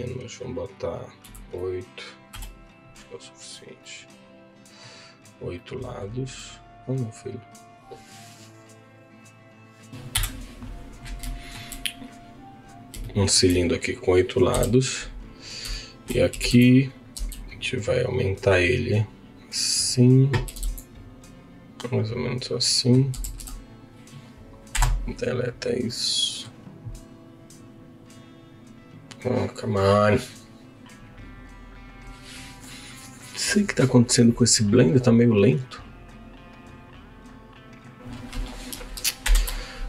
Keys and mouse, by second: 0.0-9.9 drag, 10.1 KP_Decimal, 11.2 shift+middle click, 12.1 click, 13.0 shift+middle click, 14.5 KP_1, 15.7 shift+middle click, 16.3 g, 16.7 z, 17.2 s, 20.5 g, 22.2 z, 22.6 middle click, 23.2 Tab, 23.3 3, 23.5 click, 24.7 Delete.